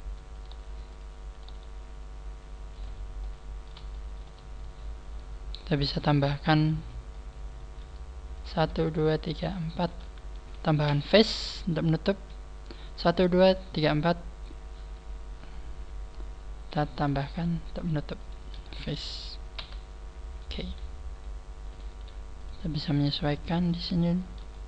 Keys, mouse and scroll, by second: 0.0 click, 0.3 click, 0.3 right click, 0.4 g, 1.3 right click, 1.4 g, 3.2 click, 3.2 middle click, 3.9 shift+middle click, 4.7 scroll up 1, 5.9 middle click, 7.5 middle click, 8.4 right click, 8.8 shift+right click, 9.2 shift+right click, 9.8 shift+right click, 10.8 f, 11.2 middle click, 16.9 right click, 17.3 shift+right click, 17.7 shift+right click, 18.2 shift+right click, 19.6 f, 21.6 right click, 21.6 scroll up 2, 22.0 g, 23.0 click, 23.0 right click, 23.1 g, 24.5 shift+middle click.